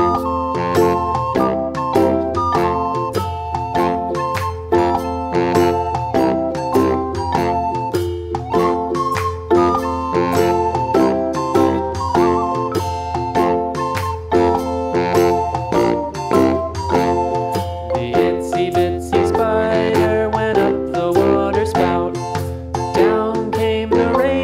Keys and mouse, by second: 0.0 click, 0.2-1.3 space, 4.5 right click, 5.0-11.8 drag, 13.2 click, 15.2 Left, 18.4 click, 21.1-22.1 drag.